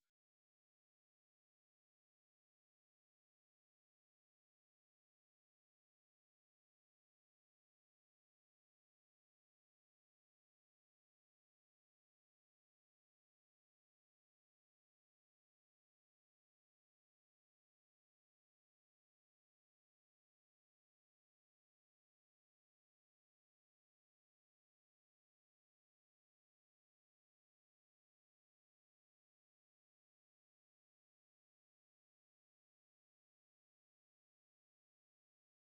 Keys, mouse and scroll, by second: 7.8 click, 10.5 click, 11.8 Down, 12.0 Down, 12.8 Up, 14.7 click, 15.7 Down, 16.6 click, 17.3 Down, 17.9 Down, 18.4 Up, 19.2 click, 19.8 Down, 20.2 Down, 21.7 click, 22.1 Down, 22.4 click, 25.1 click, 30.1 c, 35.4 click.